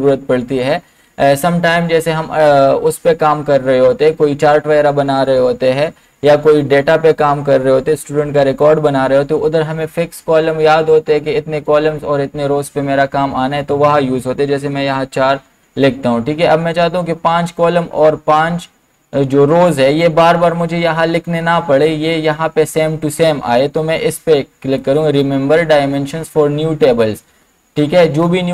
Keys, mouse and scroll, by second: 14.7 BackSpace, 14.8 4, 24.8 click.